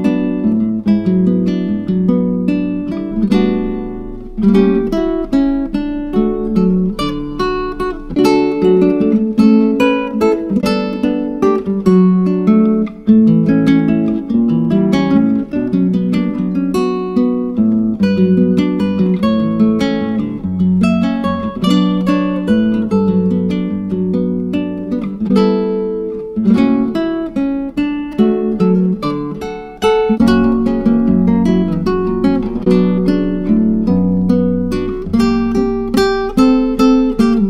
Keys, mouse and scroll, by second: 2.3-5.1 drag, 6.0 scroll up 6, 6.7 click, 9.9 click, 11.1-12.0 drag, 12.0-12.6 scroll down 2, 12.6-14.1 drag, 14.4-14.8 scroll up 4, 14.8-16.7 drag, 16.7-17.1 scroll up 3, 17.1-17.7 scroll down 2, 17.7 click, 20.8 click, 22.6 click, 23.2-26.3 drag, 29.9-33.5 drag, 33.5-34.2 scroll down 4, 34.2 click, 34.8-37.4 drag.